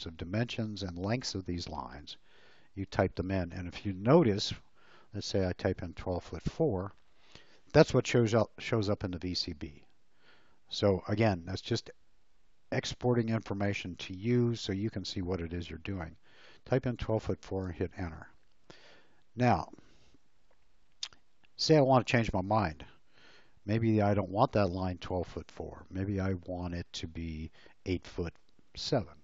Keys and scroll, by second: 5.3 1, 17.6 Return, 28.6 8.